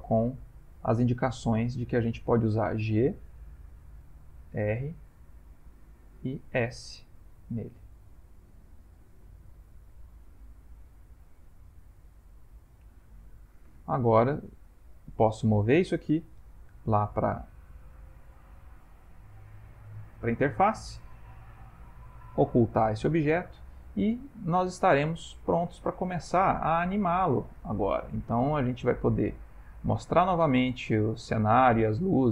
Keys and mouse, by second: 0.0 shift+middle click, 0.0 ctrl+middle click, 0.4 shift+middle click, 1.5 click, 3.0 g, 4.5 r, 6.5 s, 10.5 ctrl+middle click, 11.4 middle click, 13.3 ctrl+middle click, 14.3 shift+middle click, 15.4 click, 16.4 m, 22.2 click, 26.1 shift+middle click, 27.0 ctrl+middle click, 27.4 shift+middle click, 29.5 click, 31.8 click.